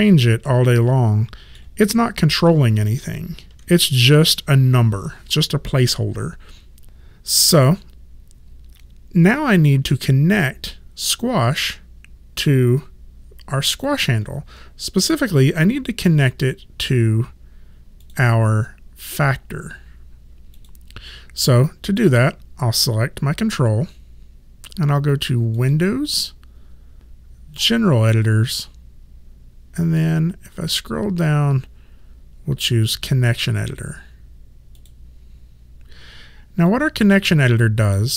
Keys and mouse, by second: 3.6 ctrl+z, 13.8 click, 18.1 click, 20.6 click, 25.6 click, 34.8 click.